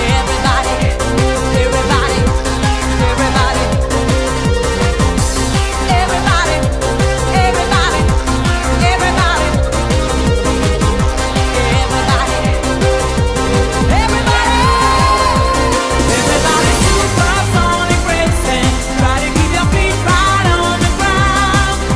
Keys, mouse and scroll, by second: 0.0 right click, 1.1 right click, 1.8 middle click, 2.4 right click, 4.3 middle click, 4.7 right click, 5.8 click, 6.8 KP_7, 7.1 scroll down 7, 7.4 shift+middle click, 7.6-8.1 scroll up 4, 8.2 right click, 9.9 click, 11.6 click, 17.8 click.